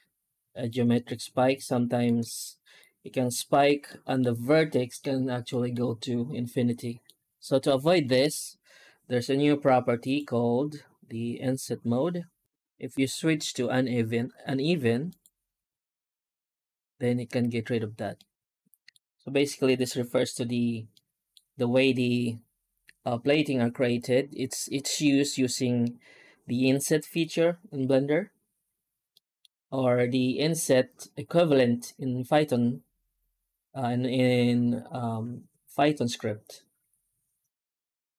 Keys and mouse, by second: 0.0-0.5 middle drag, 0.9-1.9 shift+middle drag, 2.2-2.7 middle drag, 3.7-4.1 middle drag, 4.6 middle click, 5.3 middle drag, 6.6 middle drag, 8.0 F9, 18.0-18.8 middle drag, 20.8-21.2 middle drag, 23.1 middle drag, 23.4-27.0 middle drag, 29.0-29.3 middle drag, 36.7 F9.